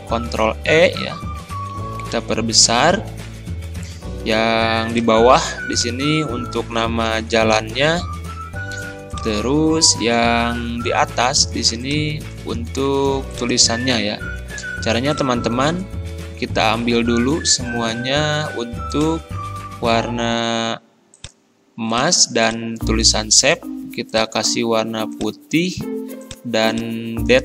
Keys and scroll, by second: 1.7 ctrl+], 7.1 ctrl+[, 16.5 ctrl+a.